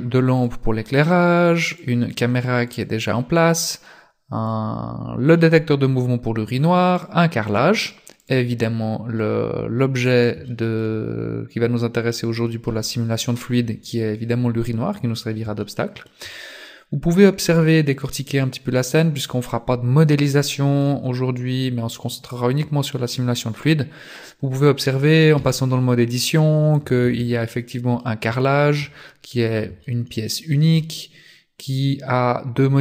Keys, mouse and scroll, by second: 0.5 right click, 0.9 scroll up 3, 1.7 right click, 3.6 right click, 3.7 middle click, 4.9 scroll up 2, 5.4 middle click, 7.0 right click, 7.5 right click, 8.3 right click, 8.7 scroll down 2, 9.2 middle click, 10.5 shift+middle click, 11.2-11.5 scroll up 3, 15.6 shift+middle click, 17.9-18.4 scroll down 2, 18.4 middle click, 21.5 scroll up 1, 23.1 right click, 25.4 Tab, 26.8 a, 27.1 a, 27.5 middle click, 28.4 shift+middle click, 29.0-29.6 scroll up 7, 29.9 shift+middle click, 31.6 click.